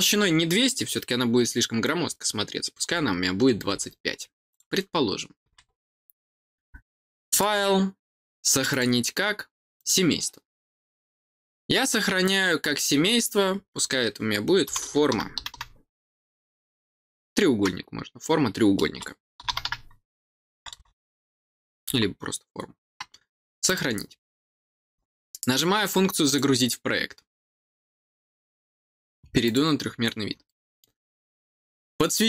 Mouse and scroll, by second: 4.4 click, 7.2 click, 8.6 click, 9.7 click, 23.6 click, 26.2 click, 29.4 click, 30.4 middle click, 31.9 click.